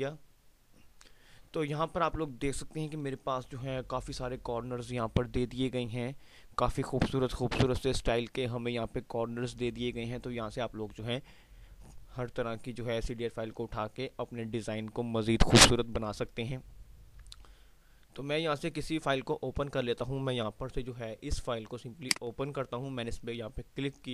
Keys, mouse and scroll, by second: 3.8 F5, 4.5 typing.